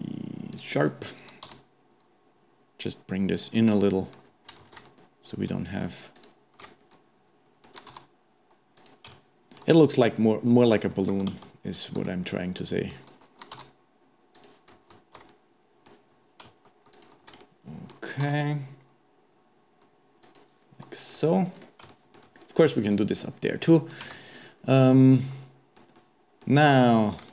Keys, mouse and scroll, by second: 1.5 g, 3.8 shift+middle click, 4.6 alt+a, 4.9-6.2 middle drag, 6.2 alt+shift+click, 6.9-7.9 middle drag, 7.9 g, 9.1-11.1 shift+middle drag, 11.1 alt+a, 11.8 alt+shift+click, 12.3-13.5 middle drag, 13.5 g, 15.3-16.9 middle drag, 16.9 alt+shift+click, 17.4 middle click, 18.3 g, 21.1 middle click, 21.2-21.9 scroll down 2, 21.9 shift+middle click, 22.5-23.0 scroll up 1, 23.0-23.7 scroll down 2, 23.7 middle click, 24.1 Tab, 24.4-24.7 scroll up 2, 24.9-27.3 middle drag.